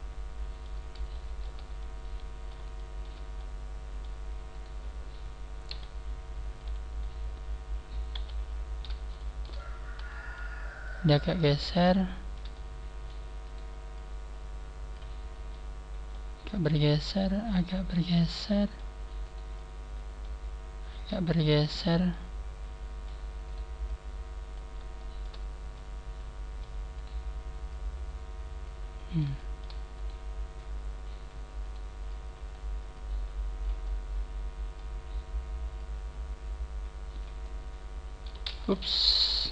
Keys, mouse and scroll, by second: 1.0 shift+middle click, 1.7 shift+middle click, 2.7 shift+middle click, 3.3 shift+middle click, 4.5 right click, 5.6 KP_1, 6.4 KP_1, 7.1 scroll down 4, 8.1 KP_3, 9.1 shift+middle click, 9.5 shift+middle click, 10.7 click, 12.0 shift+middle click, 12.5 shift+middle click, 13.3 shift+middle click, 13.3 right click, 13.9 click, 14.1 click, 15.1 scroll up 3, 15.4 middle click, 16.5 middle click, 16.5 right click, 16.5 scroll up 1, 17.0 click, 18.1 middle click, 18.5 right click, 18.7 right click, 19.5 middle click, 19.5 right click, 21.1 click, 21.7-22.0 scroll down 1, 22.0 middle click, 23.4 middle click, 23.4 right click, 23.4 scroll down 1, 23.7 click, 23.8 click, 24.9 shift+middle click, 25.3-25.7 scroll down 2, 25.7 shift+middle click, 26.9 middle click, 26.9 right click, 26.9 scroll down 1, 27.6 click, 29.3 shift+middle click, 30.1 shift+middle click, 30.1 right click, 30.5 click, 30.5 click, 31.5 right click, 32.0 click, 32.1 click, 32.4 click, 32.8 click, 33.7 middle click, 35.8 click, 37.3 middle click, 38.7 ctrl+z, 38.9 ctrl+z, 39.2 ctrl+z.